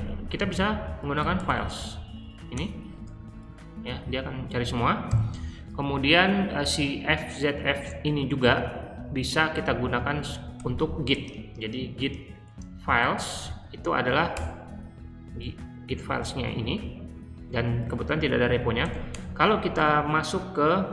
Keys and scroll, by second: 0.0-1.9 typing, 2.5 Return, 5.0 ctrl+g, 10.5 :, 11.1 g, 12.1-13.8 typing, 14.3 Return, 18.5-19.3 typing.